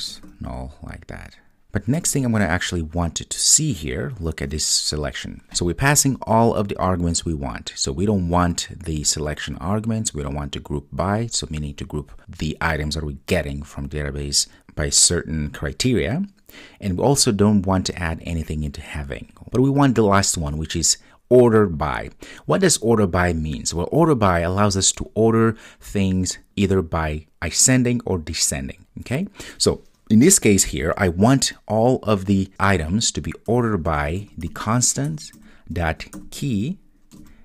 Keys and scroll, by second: 35.1 Return.